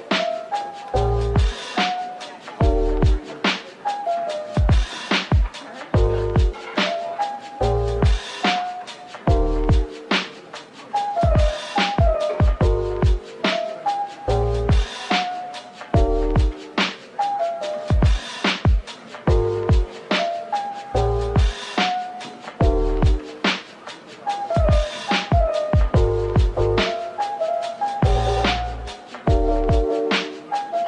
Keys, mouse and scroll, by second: 0.4 double click, 1.2 middle click, 1.9 Tab, 2.4 Tab, 5.6 double click, 8.5 shift+click, 9.8 right click, 11.4 middle click, 12.1-13.4 typing, 14.2 Return, 15.3-16.0 typing, 17.3 Tab, 17.7-18.5 typing, 18.0 middle click, 20.0-20.3 scroll down 1, 20.3 middle click, 21.0-21.9 typing, 22.3 double click, 22.7 middle click, 26.9-28.2 typing, 29.6 typing, 30.3 ctrl+click.